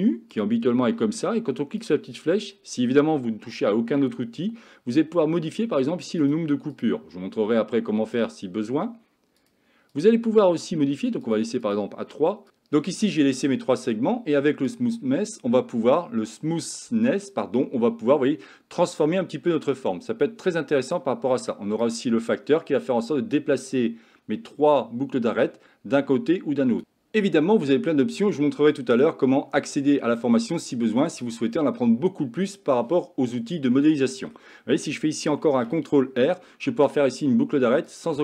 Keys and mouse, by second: 0.4 click, 1.9 click, 6.2 click, 11.4 click, 11.7 click, 14.7-21.0 drag, 21.8-26.8 drag, 27.7-29.0 middle drag, 30.2 shift+middle click, 33.8 middle click, 35.5 ctrl+r.